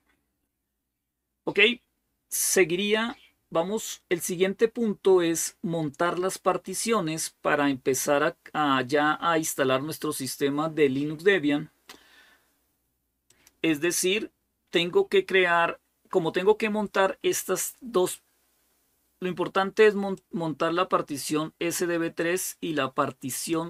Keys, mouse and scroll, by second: 2.1 click, 2.9-5.4 scroll down 1, 5.4 scroll down 1, 13.1-14.1 drag, 19.9 click, 23.5 click.